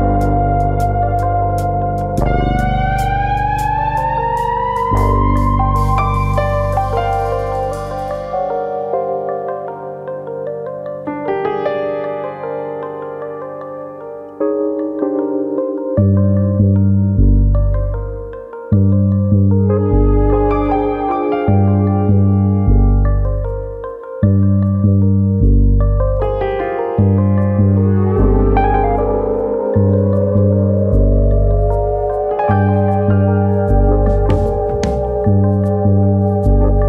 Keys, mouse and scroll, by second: 0.2 middle click, 1.6 middle click, 1.8 shift+middle click, 1.9 shift+middle click, 2.3 click, 2.6 shift+click, 2.9 middle click, 3.6 g, 4.4 click, 4.7 click, 4.7 shift+click, 5.0 shift+click, 5.8 g, 7.0 click, 7.2 middle click, 7.7 click, 8.0 middle click, 8.5 shift+click, 9.0 shift+click, 9.7 g, 10.6 click, 10.7 middle click, 11.2 middle click, 12.9 ctrl+click, 13.6 g, 14.5 click, 14.7 middle click, 15.1 click, 15.3 middle click, 16.1 g, 16.8 click, 17.0 middle click, 17.8 middle click, 18.5 middle click, 19.5 alt+click, 19.8 middle click, 20.5 click, 21.3 click, 22.0 alt+click, 23.0 middle click, 23.5 ctrl+z, 23.7 middle click, 24.0 middle click, 24.7 click, 25.3 middle click, 25.7 middle click, 26.5 click, 27.0 click, 27.9 middle click, 27.9 click, 28.3 click, 29.0 middle click, 29.3 scroll down 2, 29.5 Tab, 29.9 middle click, 30.2 scroll down 5, 30.5 middle click, 30.9-31.5 scroll down 2, 31.2 middle click, 32.7 middle click, 33.5-35.1 scroll up 3, 35.1 scroll up 2, 35.4 shift+middle click, 35.7 middle click, 36.0 scroll up 1, 36.2 Tab, 36.5 middle click.